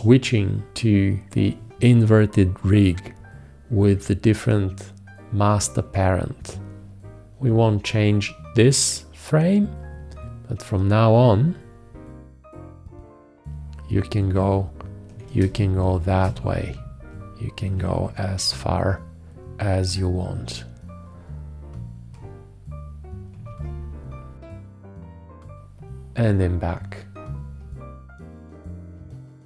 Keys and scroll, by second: 15.8 space.